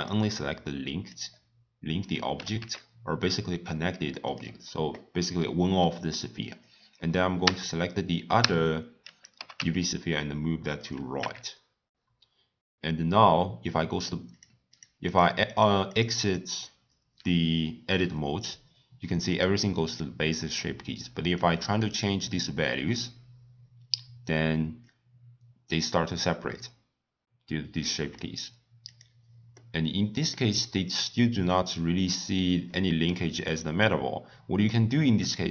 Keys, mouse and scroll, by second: 2.3 g, 6.5 click, 7.4 l, 8.3 l, 9.3 g, 11.1 Tab, 14.3 click, 14.7 click, 15.0 click, 15.4 click, 15.9 drag, 16.2 click, 19.3 click, 19.8 click, 21.3-24.4 drag, 28.8 click, 29.5-31.5 middle drag, 31.5-32.1 scroll down 1, 32.1 scroll up 2, 32.1-32.6 scroll down 1, 32.6-35.5 middle drag.